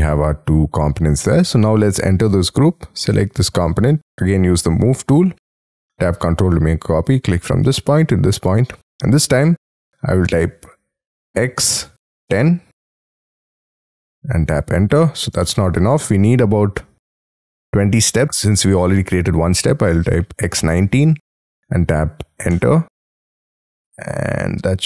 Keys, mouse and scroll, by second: 1.6 double click, 4.6 m, 11.3 x, 12.2 1, 12.9 0, 13.5 Return, 14.2-15.1 scroll down 19, 15.4 middle click, 18.3 x, 20.4-21.2 typing, 22.5 Return, 23.5 middle click.